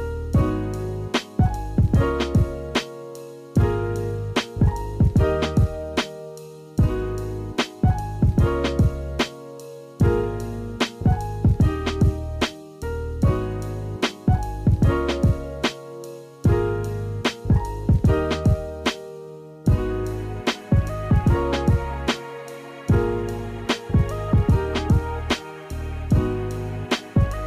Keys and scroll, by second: 1.2 space, 1.7 space, 3.0 space, 5.5 Delete, 6.9 space, 8.8 space, 13.1 space, 14.1 space, 14.3 ctrl+z, 14.7 space, 16.1 space, 17.4 ctrl+z, 18.3 space, 20.6 space, 25.3 space, 26.0 space.